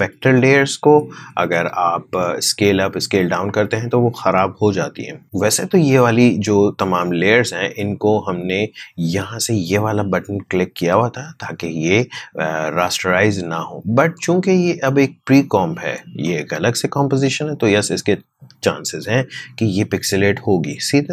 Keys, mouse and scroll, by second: 2.0-3.8 scroll up 1, 6.5 click, 6.6 click, 14.1-21.1 drag.